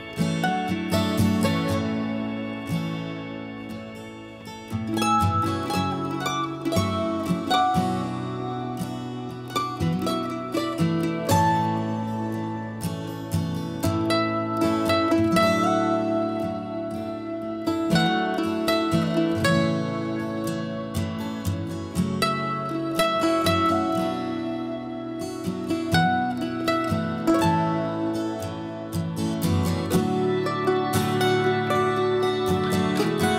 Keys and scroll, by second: 8.3 ctrl+h, 11.9 ctrl+h, 15.0 b, 20.3 Escape, 21.9 b, 22.3 Escape, 23.3 Escape, 27.8 b.